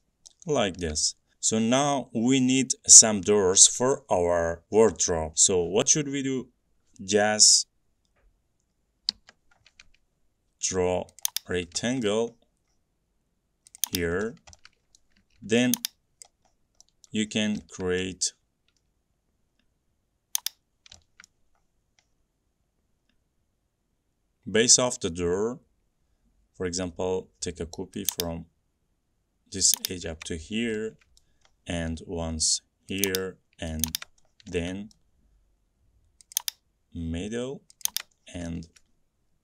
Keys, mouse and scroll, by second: 0.6 middle click, 0.7 middle click, 2.7-6.4 middle drag, 9.3 r, 9.8 middle click, 9.9 middle click, 11.4 click, 11.7 middle click, 11.8 middle click, 12.1-13.0 shift+middle click, 12.2 middle click, 12.5 middle click, 12.6 middle click, 12.9 middle click, 13.9 click, 13.9-14.5 scroll, 15.1 scroll, 16.4 click, 16.6 scroll, 16.9 middle click, 17.3 middle click, 17.4 middle click, 17.5 middle click, 17.5 middle click, 18.2 middle click, 19.1 middle click, 19.4 m, 19.8 middle click, 20.5 click, 21.3 shift+middle click, 21.3 shift+middle click, 21.4 middle click, 21.4-22.3 scroll, 28.2 click, 30.0 click, 30.6 scroll, 31.3-32.2 scroll, 33.2 click, 34.0 click, 34.4-35.1 scroll, 35.1 middle click, 36.4 scroll, 36.5 click, 38.0 click, 38.4 middle click, 38.6-39.0 scroll, 39.0 middle click.